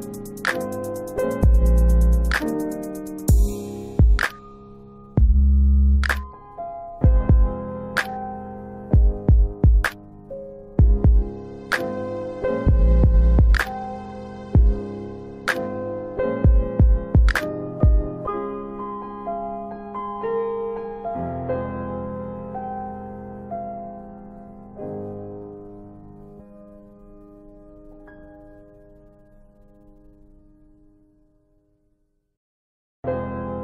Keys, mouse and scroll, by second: 0.6 middle click, 1.9 alt+middle click, 4.5 click, 5.5 ctrl+click, 8.0 Delete, 15.5 click, 16.5 ctrl+click, 17.1 scroll up 1, 17.9 middle click, 18.8 super+space, 19.0 super+middle click, 19.8 alt+x, 20.4 ctrl+alt+middle click, 21.0 middle click, 21.6 ctrl+alt+middle click, 22.8 ctrl+click, 27.0 Delete, 28.3 alt+w, 29.3 alt+w, 30.3 alt+x, 30.8 middle click, 30.9 scroll up 1, 31.7 click, 32.3 scroll down 1, 32.8-33.1 scroll up 2.